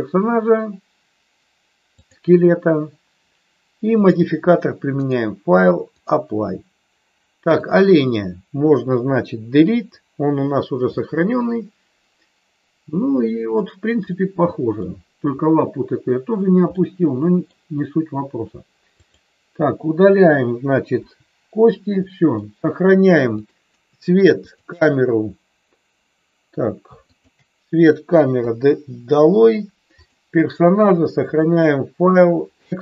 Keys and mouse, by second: 1.8 click, 3.9 click, 4.9-6.1 drag, 9.6 Delete, 11.1-13.6 middle drag, 14.1-14.8 middle drag, 16.8-17.4 middle drag, 18.9 click, 20.9 Delete, 22.1 middle click, 23.3 click, 24.4 shift+click, 27.1 shift+click, 28.3 Delete, 29.9 click, 31.3-32.8 drag.